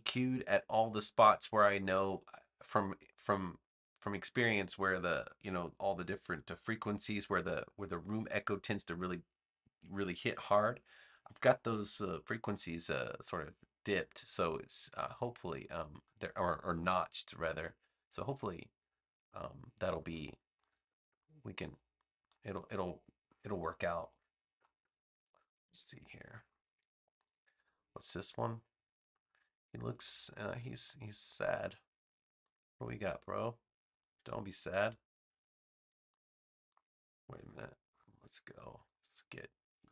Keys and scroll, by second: 25.7 shift+super+g, 38.0 v.